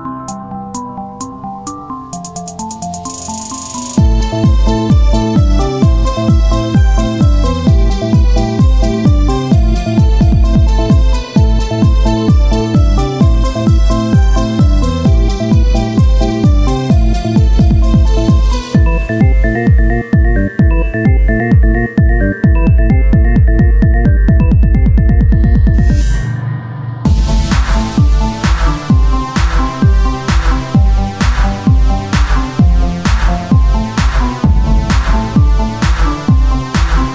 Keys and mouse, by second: 1.8 shift+d, 3.3-5.4 drag, 5.6 z, 7.6 r, 8.8 z, 9.9 z, 11.6-14.0 drag, 14.0 z, 14.3 KP_1, 14.6-16.7 z, 28.2 Tab, 29.5 z, 33.2 KP_1, 34.8 Tab, 36.5 Tab.